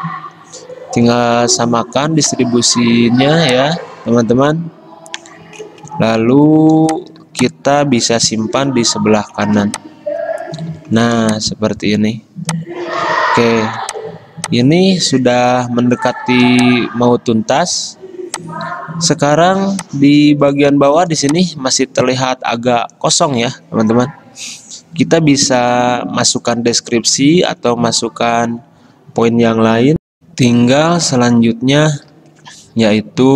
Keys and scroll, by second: 3.4 ctrl+z, 8.8 ctrl+g, 27.6 ctrl+z, 30.2 F9.